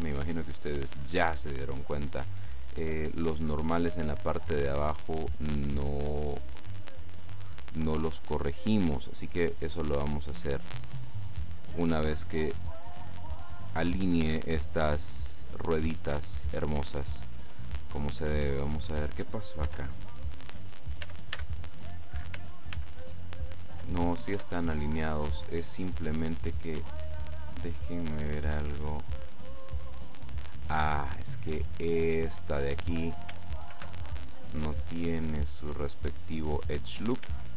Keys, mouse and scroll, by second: 0.2 middle click, 1.8-2.4 scroll up 2, 2.4 middle click, 5.0-6.9 drag, 6.6 middle click, 9.8-11.6 drag, 12.0-13.1 middle drag, 13.1-14.3 drag, 14.1 middle click, 18.3 right click, 19.8 Tab, 21.1 a, 22.8 ctrl+n, 24.4 Tab, 25.2-25.6 scroll down 2, 25.6 click, 26.8 Tab, 27.6-32.0 drag, 32.0-32.9 scroll up 2, 33.8 ctrl+r, 34.5 click, 36.6 click.